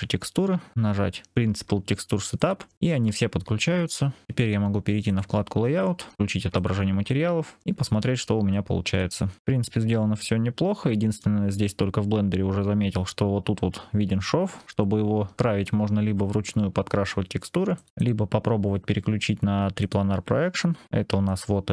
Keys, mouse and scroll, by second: 5.0 click, 6.4 click, 7.5 scroll up 2, 7.7 scroll down 1, 7.8-8.2 scroll down 2, 8.4 alt+drag, 9.3 shift+click, 9.4-11.1 middle drag, 11.5-12.2 scroll up 2, 12.2 scroll down 1, 12.3-13.9 scroll down 1, 14.6-15.3 scroll down 1.